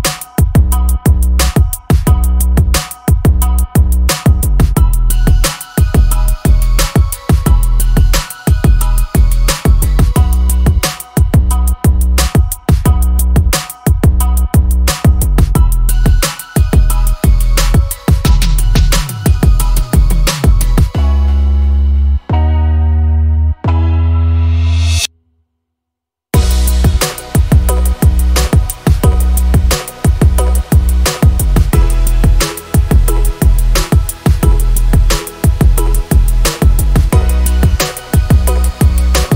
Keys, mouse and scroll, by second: 1.6 middle click, 2.0 middle click, 2.6 middle click, 4.0 middle click, 6.7 middle click, 8.6 middle click, 12.2 middle click, 14.2 middle click, 15.5 middle click, 16.4 middle click, 16.7 middle click, 17.0 middle click, 17.4 middle click, 18.8 middle click, 19.1 middle click, 20.4 middle click, 21.7 middle click, 23.2 middle click, 24.3 middle click, 26.3 middle click, 26.7 middle click, 27.9 middle click, 29.2 middle click, 29.5 middle click, 32.9 middle click, 36.1 middle click, 36.5 middle click, 36.8 middle click.